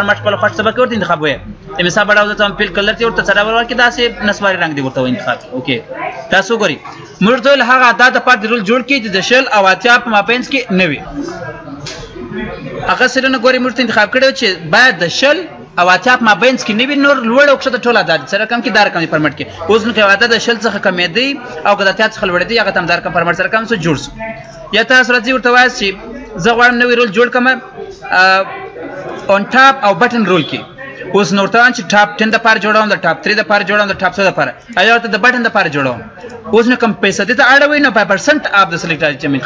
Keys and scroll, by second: 10.6 F9, 23.3 ctrl+z.